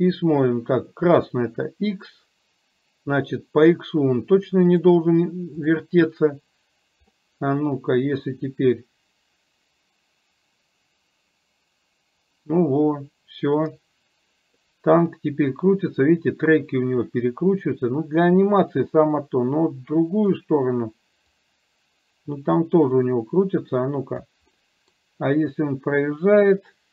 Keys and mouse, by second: 4.8 click, 7.1 middle click, 8.8-14.6 drag, 15.7-20.4 drag, 21.4-24.4 drag, 24.6 middle click.